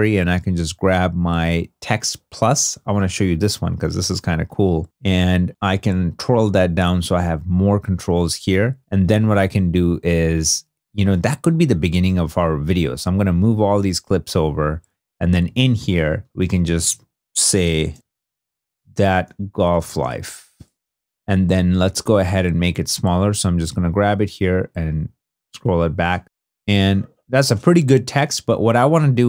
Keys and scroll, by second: 16.6 super+a, 17.6-21.5 typing.